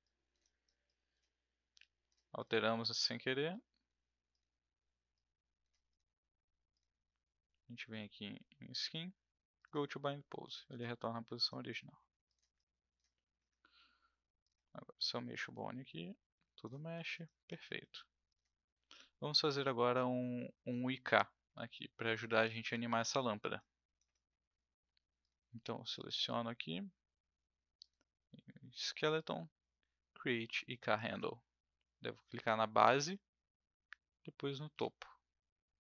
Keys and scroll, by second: 13.7 w, 16.8 ctrl+z.